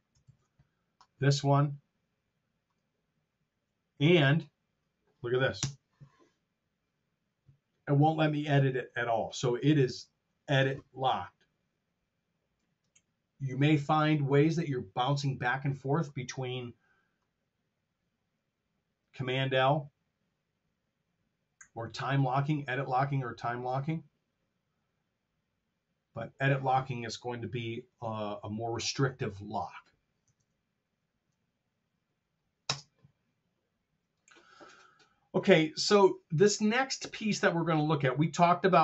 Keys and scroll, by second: 0.1 super+z, 3.9 F7, 5.5 BackSpace, 30.3 super+Tab, 32.6 space.